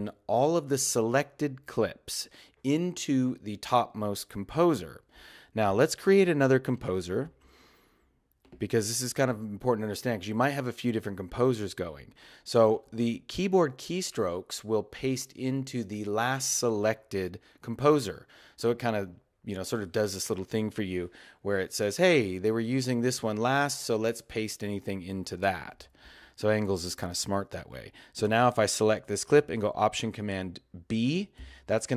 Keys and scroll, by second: 31.4 alt+super+b.